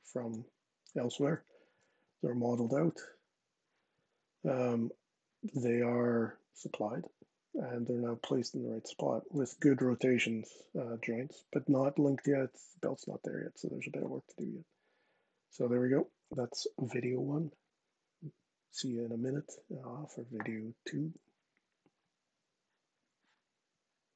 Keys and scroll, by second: 0.9 super+z, 9.7 super+z.